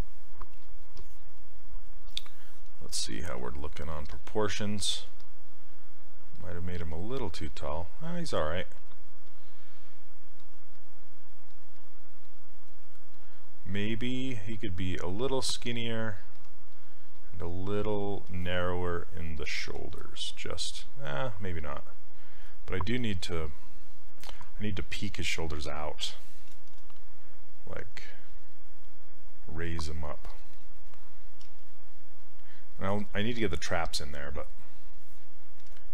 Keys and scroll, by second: 31.5 s.